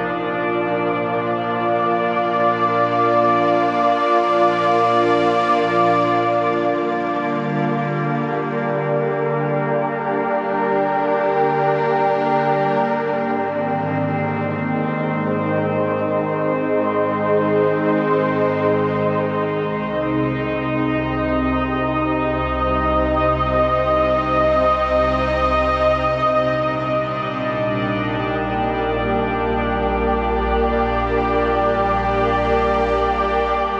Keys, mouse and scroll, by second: 0.0-2.0 typing, 0.3 click, 0.9 click, 1.3 click, 1.5 click, 1.9 click, 2.8 click, 4.3-6.1 alt+drag, 6.1-8.7 typing, 6.2 click, 7.2 click, 7.5 click, 8.0 click, 8.3 click, 8.7 click, 10.1 scroll up 1, 17.1 click, 17.1 ctrl+v, 19.1-25.2 drag, 26.1-26.5 typing, 27.5 typing, 28.9 typing, 30.4-33.4 drag, 33.4-33.7 shift+drag.